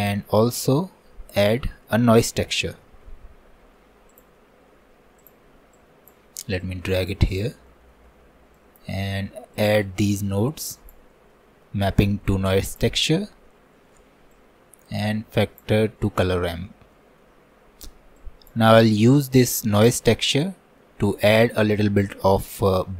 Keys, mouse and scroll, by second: 0.0 click, 0.5 shift+a, 5.8-7.7 drag, 7.7 middle click, 8.1-8.6 scroll up 2, 8.6 click, 9.6-11.3 drag, 11.3-12.5 middle drag, 12.5-16.0 drag, 16.0 middle click, 16.6-17.0 scroll up 1, 17.0-18.2 middle drag, 18.2-20.1 drag, 20.1 middle click, 20.5 scroll down 2, 20.8-22.8 middle drag, 22.8-22.9 drag.